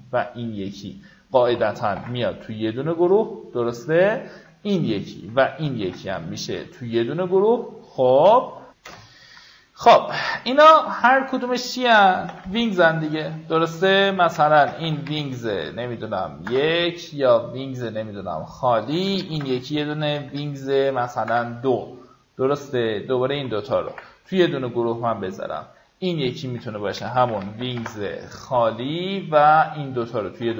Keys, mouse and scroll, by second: 0.7 ctrl+click, 1.6 ctrl+g, 2.3 click, 4.4 ctrl+click, 5.4 ctrl+g, 6.5 click, 8.6 F9, 10.6 click, 11.5-13.0 typing, 13.1 ctrl+a, 14.2 alt+shift+w, 14.4-15.4 typing, 16.2 Return, 18.0 click, 18.9-19.4 typing, 20.9 typing, 21.1 Return, 22.4 click, 22.9 ctrl+click, 23.7 ctrl+g, 24.4 click, 26.8-27.9 typing, 28.7 click, 29.1 ctrl+click, 30.2 ctrl+g.